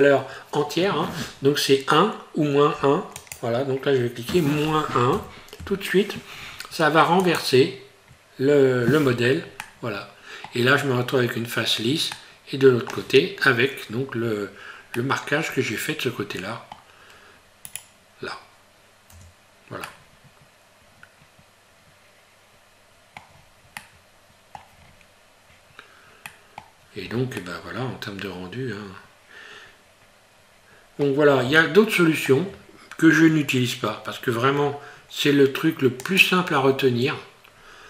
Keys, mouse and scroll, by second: 3.2 click, 9.6 middle click, 12.2 middle click, 13.9 scroll down 2, 14.9 middle click, 17.7 right click, 19.1 Tab, 19.9 middle click, 23.3 scroll down 4, 23.8 middle click, 24.8 scroll up 1, 26.3 middle click, 26.3 scroll up 2, 27.4 middle click, 31.6 shift+middle click, 36.1 click.